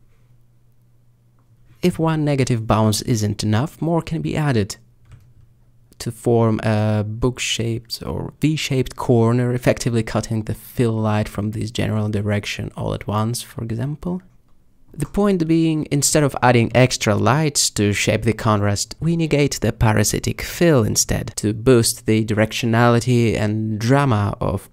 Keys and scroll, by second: 3.4 alt+d, 5.3 r, 5.3 z, 8.3 g, 8.4 shift+z, 11.8 alt+g, 12.6 r, 14.4 alt+g, 21.1 alt+g.